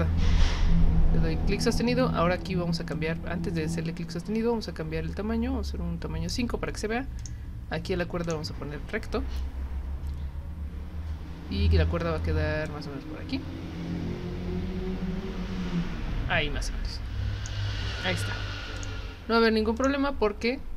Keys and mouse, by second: 2.9-6.3 drag, 7.2 click, 8.2 click, 12.7-17.4 drag, 18.8 click, 19.7 click.